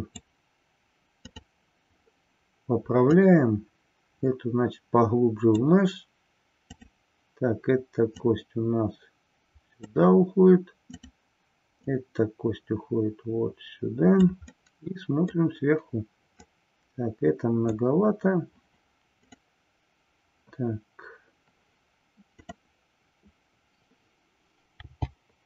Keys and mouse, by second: 1.2 click, 3.2-5.6 drag, 6.6 click, 8.4-10.0 drag, 12.0-14.4 drag, 14.8-15.5 middle drag, 16.5-17.9 drag, 19.1 click, 22.2 click.